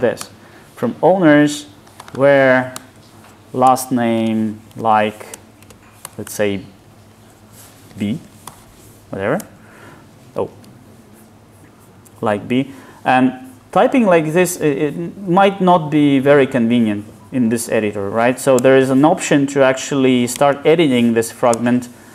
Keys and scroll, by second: 0.3 Return, 10.5 super+z, 18.7 alt+Return.